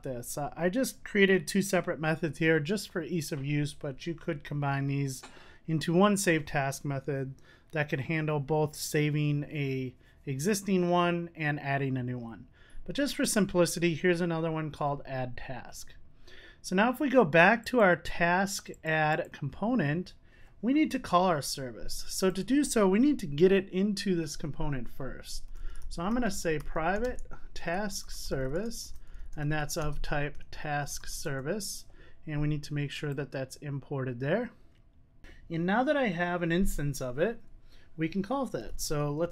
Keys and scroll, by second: 31.2 Return, 33.6 Return.